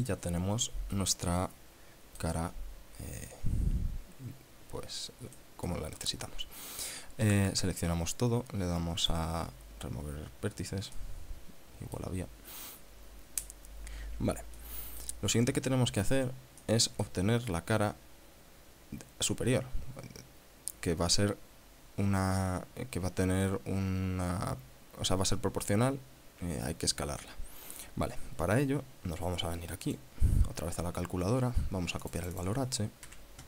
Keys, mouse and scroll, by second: 1.5 click, 2.9-3.3 scroll down 1, 5.9 middle click, 7.7 a, 9.5 click, 11.5-12.7 middle drag, 15.1 middle click, 16.5 scroll down 1, 17.2 middle click, 30.5 click, 32.6 click.